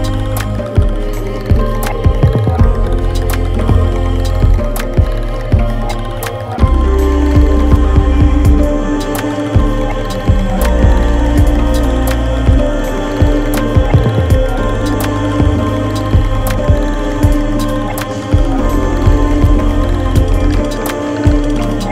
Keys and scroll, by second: 1.9 Down, 2.1 Down, 2.3 Down, 2.5 Down, 2.9 Down, 4.2 Down, 4.4 Down, 4.6 Down, 4.8 Left, 5.5 Left, 5.7 Left, 18.2 Left, 18.3 Left, 18.5 Left.